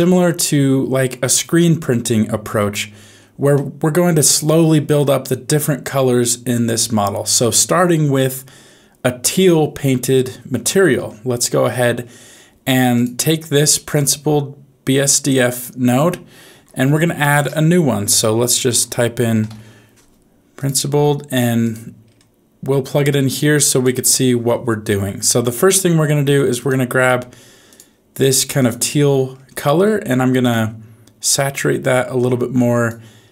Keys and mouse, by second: 3.5-7.1 middle drag, 13.9-15.6 drag, 17.1 shift+a, 22.8 click, 29.6 middle click, 30.4 click.